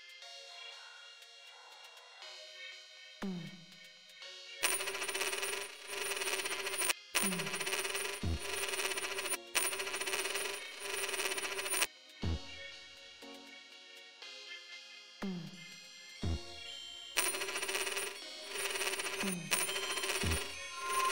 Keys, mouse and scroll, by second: 0.3 click, 2.6 right click, 3.7 click, 4.5 space, 6.9 space, 9.4 space, 11.9 space, 13.4 right click, 14.2 click, 15.6 right click, 16.5 click, 17.2 space, 19.4 space.